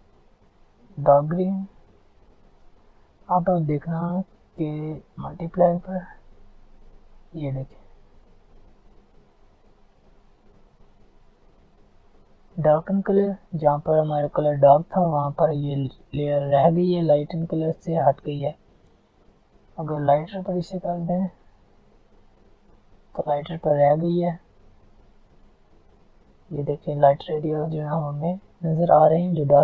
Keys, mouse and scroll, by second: 7.9 Down, 10.0 Up, 19.3 Down, 21.2 click.